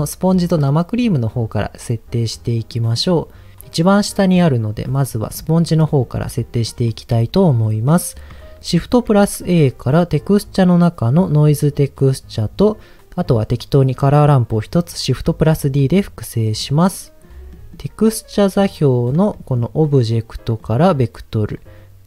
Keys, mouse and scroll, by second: 2.2-2.7 scroll up 1, 2.7 middle click, 3.0 scroll up 1, 4.8 scroll up 1, 5.8 middle click, 5.8 scroll up 1, 6.6 middle click, 13.2 click, 16.6 click, 16.9 scroll down 1, 17.5 scroll down 3, 17.5 middle click, 18.6 click, 19.3 middle click, 19.6-20.3 scroll up 2, 20.5-21.6 drag.